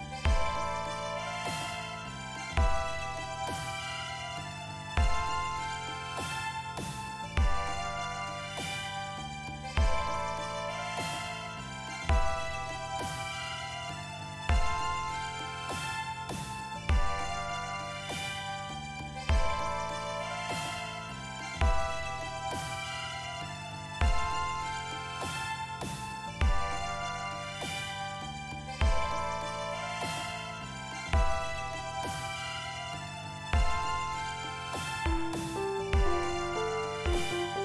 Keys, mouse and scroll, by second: 0.3 click, 1.7-2.9 drag, 11.5 click, 24.3 click, 26.7-27.9 drag, 29.6-30.7 drag, 31.8-32.9 drag, 34.9 click.